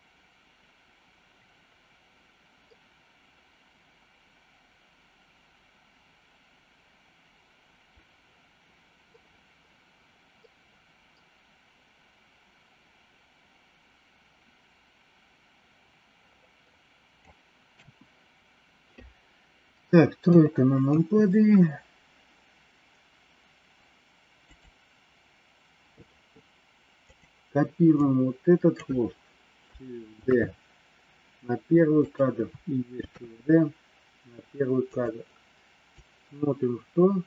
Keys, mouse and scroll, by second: 17.7 KP_1, 20.2 KP_3, 20.8 KP_3, 24.4 click, 26.9 click, 27.8 click, 30.2 shift+d, 35.8-37.2 drag.